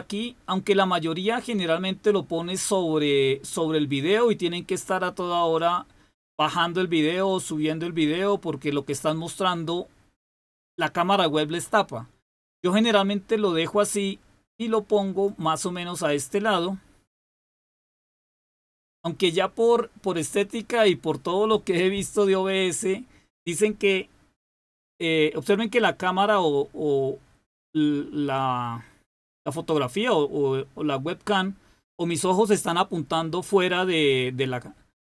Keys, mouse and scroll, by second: 18.1-20.3 drag.